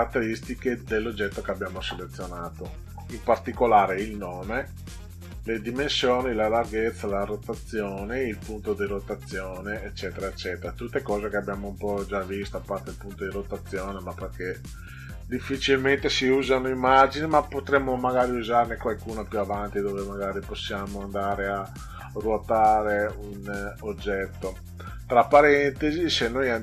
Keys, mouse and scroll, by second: 4.2 click, 25.7 click.